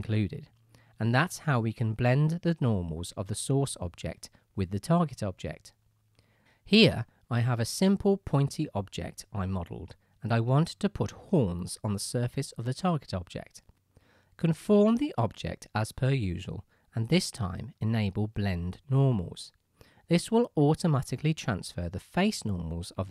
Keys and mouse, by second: 6.6-9.9 drag, 10.1-13.8 shift+drag, 13.8-15.1 middle drag, 18.2 click, 19.1 click, 19.4-19.8 right drag, 19.8 click, 19.8 right click, 20.0-21.2 drag, 22.2 click, 22.6-23.0 middle drag, 23.0 right drag, 23.0 middle drag.